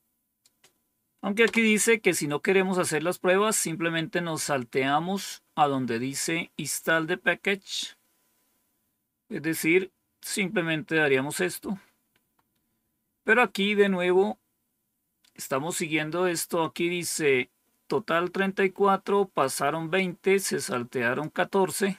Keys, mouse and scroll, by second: 1.3 Return, 8.0-8.7 scroll down 1, 8.7-9.5 scroll down 1, 12.2-19.3 scroll up 1, 19.3 click, 20.6 click.